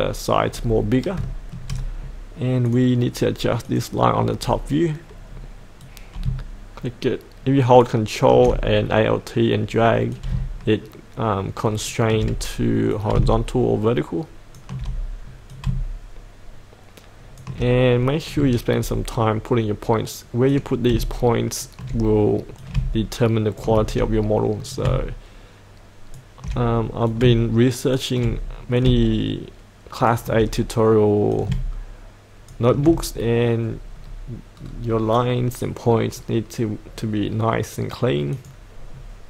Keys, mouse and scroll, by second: 0.5-1.2 scroll up 1, 2.6 click, 4.4-5.8 scroll down 1, 5.8 click, 6.3-8.3 ctrl+drag, 10.1 click, 10.4-12.4 ctrl+drag, 13.0 click, 15.6-17.5 drag, 17.9-18.4 scroll down 1, 18.4 shift+middle click, 18.9-20.5 scroll up 1, 20.5-22.6 drag, 24.7 click, 24.9 click, 27.1 click, 27.3 click, 28.8-30.7 drag, 31.3 click, 32.7 alt+click, 34.0-34.6 scroll down 1, 34.6-37.0 scroll up 1, 37.0-38.3 scroll down 1, 38.3 click, 38.9-39.2 scroll up 1.